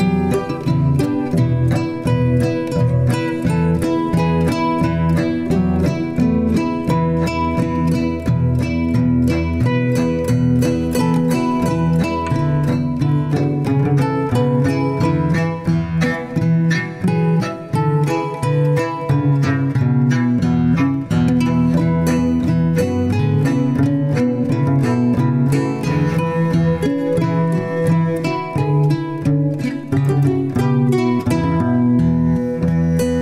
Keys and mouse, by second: 0.1 click, 1.3 g, 7.9 Tab, 8.8 Tab, 10.3 g, 11.6 alt+z, 12.5 g, 15.4 drag, 19.0 click, 21.9 drag, 21.9 g, 25.3-26.0 middle drag, 27.0-28.3 middle drag, 29.9 middle click.